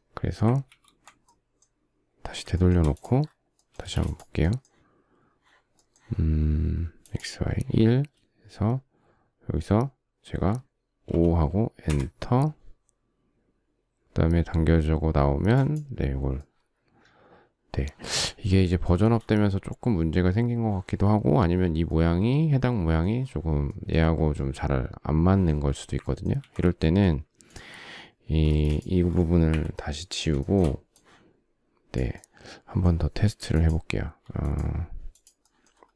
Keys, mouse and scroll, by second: 0.3 ctrl+z, 0.9 ctrl+middle click, 2.3 shift+middle click, 3.4 space, 10.7 typing, 11.5 Return, 18.5 shift+middle click, 25.6 ctrl+middle click, 26.0 ctrl+z, 28.1 space, 29.1 Delete, 30.0 shift+middle click.